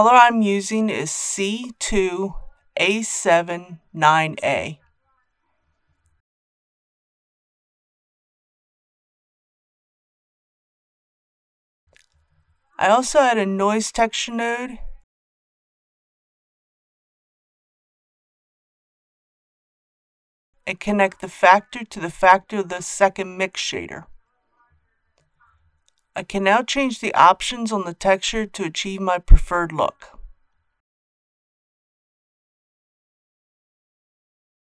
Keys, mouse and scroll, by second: 0.9 c, 1.4 KP_2, 2.3 KP_7, 2.6 KP_9, 10.6 shift+middle click, 12.1 shift+a, 16.5-23.7 drag, 25.4-28.4 scroll down 1, 29.0 click, 29.9 KP_2, 30.2 KP_0, 30.8 Tab, 31.3 KP_5, 32.0 Tab, 32.9 KP_1, 33.6 Tab, 34.0 KP_Decimal, 34.2 KP_2.